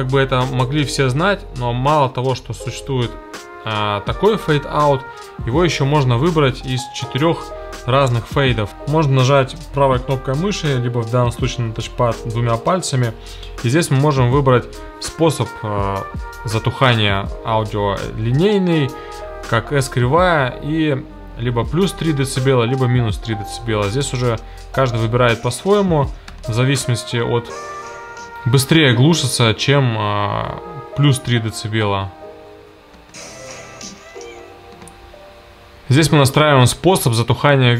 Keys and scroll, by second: 25.1 space, 32.9 space, 34.8 space.